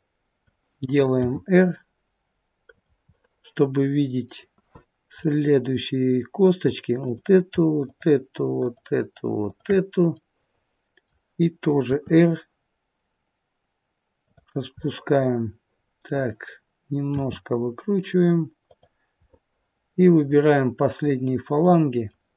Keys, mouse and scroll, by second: 1.1 r, 3.1 middle click, 4.5 r, 5.2 middle click, 7.0 click, 7.8 shift+click, 10.1 middle click, 11.8 r, 14.8 middle click, 17.1 r, 19.2 middle click, 21.6 middle click.